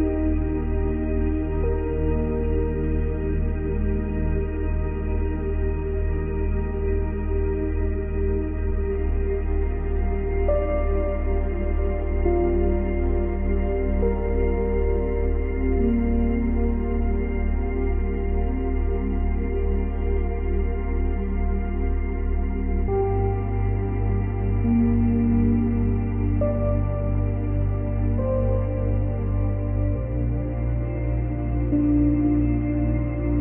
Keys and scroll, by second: 6.4 Delete, 8.7 ctrl+z, 9.8 Delete, 11.8 space, 15.2 space, 16.2 space, 18.9 space, 20.4 space, 21.1 space, 27.4 ctrl+z.